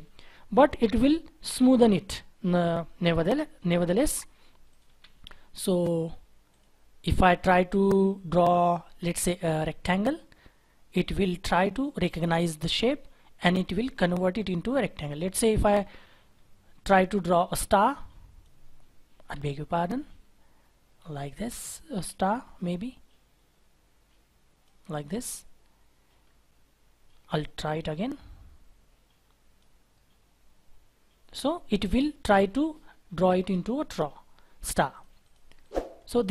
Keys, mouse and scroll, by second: 4.9 Delete, 8.4-8.9 scroll down 2, 8.9-9.7 scroll up 1, 14.4-15.4 scroll down 1, 15.4-16.3 scroll up 1, 16.3-17.8 scroll down 1, 19.8 ctrl+z, 20.3-21.5 scroll up 1, 26.2-26.8 scroll down 1, 26.8-27.4 scroll up 1, 31.9-32.7 scroll down 1, 32.7-33.3 scroll up 1, 33.3-35.0 scroll down 1, 35.2 double click.